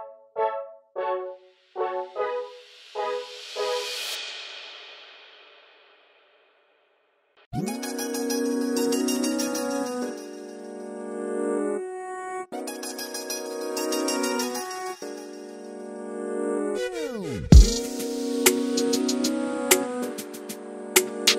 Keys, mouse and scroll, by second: 0.0 middle click, 0.8 KP_7, 1.2 shift+right click, 1.9 click, 2.9 middle click, 3.6 KP_3, 3.8 KP_1, 4.1 KP_9, 4.4-5.6 right drag, 5.6 click, 6.7-7.8 drag, 8.0 middle click, 8.8 click, 9.0 middle click, 9.7 click, 9.9 middle click, 10.8-11.1 scroll up 1, 11.1 KP_1, 11.5 KP_3, 13.2 click, 14.0-15.1 right drag, 15.1 scroll down 10, 15.1 click, 15.3 right click, 15.5 scroll up 1, 15.7-17.0 right drag, 17.0-18.1 drag, 18.1 middle click, 19.0 KP_1, 19.5 KP_3, 19.7 KP_9, 20.0-21.3 right drag.